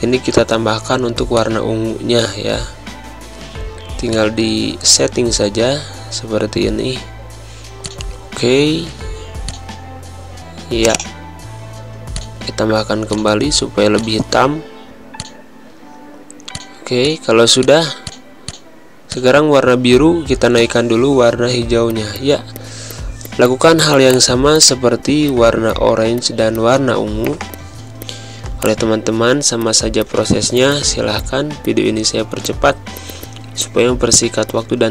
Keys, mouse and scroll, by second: 3.2 c, 4.0 click, 7.7-12.8 drag, 13.3-14.6 drag, 18.1 z, 18.4 click, 18.8 space, 19.0 click, 19.2 space, 20.4 click, 21.2 ctrl+shift+], 21.9 click, 29.6 click, 30.2 click, 31.4 g, 31.6 click, 33.1 space, 33.2 click, 33.3 space, 33.6 click, 33.9 ctrl+shift+], 34.5 click.